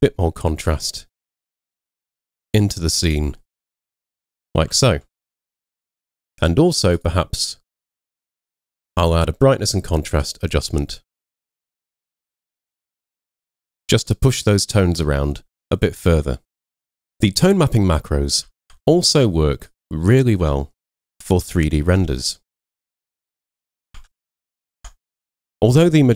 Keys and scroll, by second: 4.7 super+0, 18.6 super+w, 20.4 super+Tab, 21.5 super+Tab, 24.0 super+Tab.